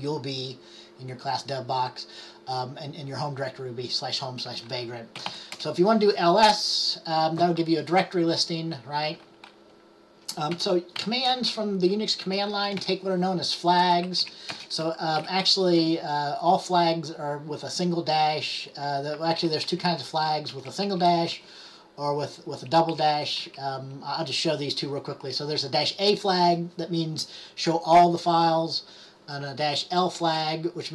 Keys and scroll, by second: 5.0-5.9 typing, 10.7-11.1 typing, 12.1-13.4 typing, 14.3 Left, 14.6-15.8 typing, 20.6 Left, 20.8 Left, 20.9 Left, 21.4 Right, 22.9 Right, 23.1 Right, 23.5 Right, 30.3 space.